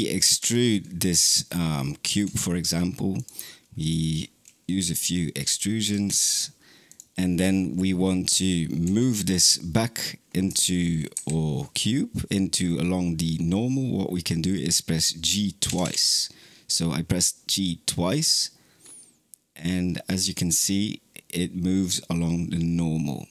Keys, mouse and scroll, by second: 0.2 3, 0.5 click, 1.9 e, 3.6 click, 4.6 e, 5.7 click, 5.9 e, 8.7 g, 15.5 g.